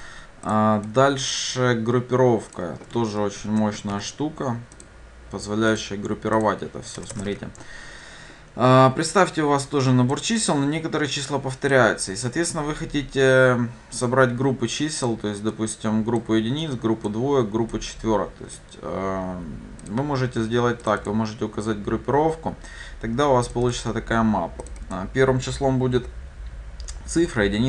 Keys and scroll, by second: 4.0 ctrl+c, 7.4 ctrl+v.